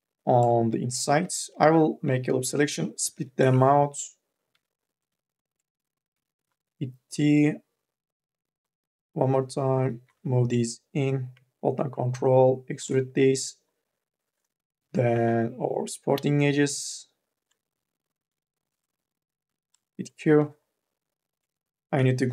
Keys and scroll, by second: 0.9 u, 1.4 l, 2.9 u, 3.3 p, 4.2 2, 4.6 e, 5.9 t, 10.0 e, 14.6 k, 15.0 l, 19.3 q.